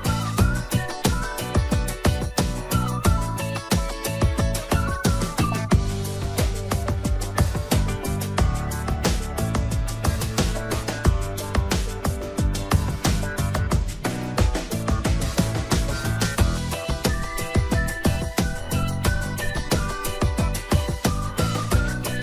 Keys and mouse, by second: 1.1 shift+d, 5.1 click, 7.5 click, 8.7 click, 13.4 click, 15.0 click, 16.3 click, 18.0-19.1 drag, 19.4 click, 19.7-21.0 drag, 21.5 shift+middle click, 21.8 middle click.